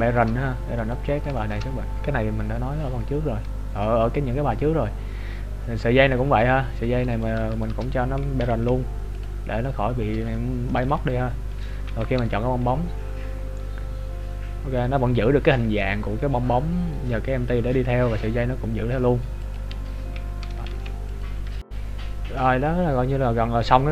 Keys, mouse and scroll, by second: 0.1 shift+middle click, 0.9 right click, 1.5 shift+middle click, 5.7-6.2 scroll up 1, 6.2 right click, 7.6 right click, 8.1 shift+right click, 8.4 ctrl+p, 9.9-10.3 scroll down 4, 10.3 shift+middle click, 11.1 right click, 12.0 g, 19.8-20.6 scroll up 1, 22.1-22.8 scroll down 4, 22.8-23.1 scroll up 1.